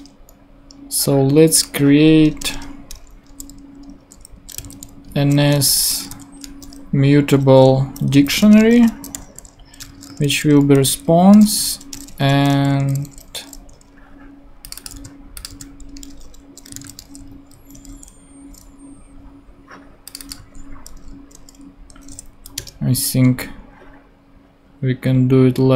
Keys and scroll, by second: 2.4 Return, 4.3-7.2 typing, 8.0 Down, 8.4 Return, 8.6-12.8 typing, 15.5 super+v, 15.9 super+space, 16.5-17.3 typing, 17.7 super+;, 18.4 ;, 20.4 d, 22.3 Down, 22.6 Return.